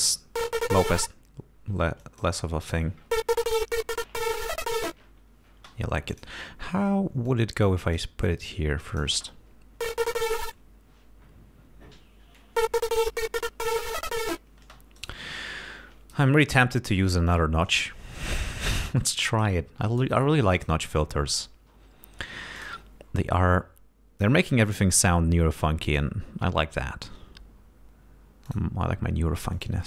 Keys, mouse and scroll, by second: 2.1 click, 5.6 space, 6.2 click, 7.3 click, 8.9 click, 9.2 space, 14.7 space, 15.0 right click, 17.3 click, 18.9 click, 20.2 click, 22.6 click, 23.4-24.5 drag, 24.9 click, 25.9 click, 28.5 click, 29.6 click.